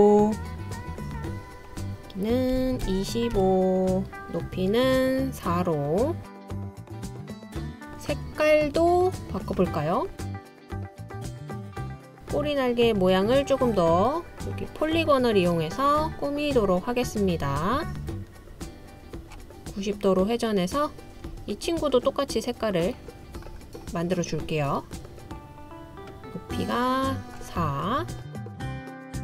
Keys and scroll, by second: 2.6-3.4 typing.